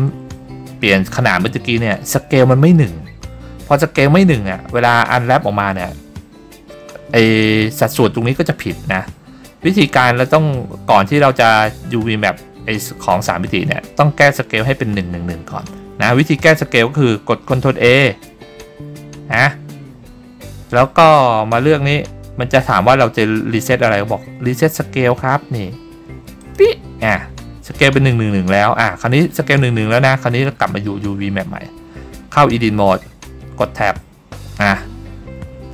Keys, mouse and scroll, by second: 0.2 Tab, 33.8 Tab.